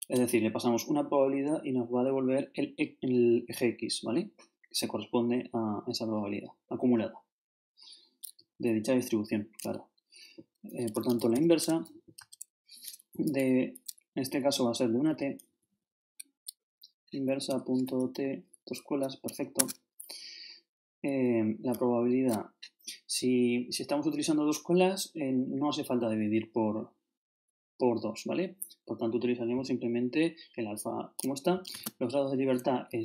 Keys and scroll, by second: 10.9-12.2 typing, 13.1 shift+Down, 14.4 shift+Down, 19.6 shift+Tab, 21.7 shift+Up.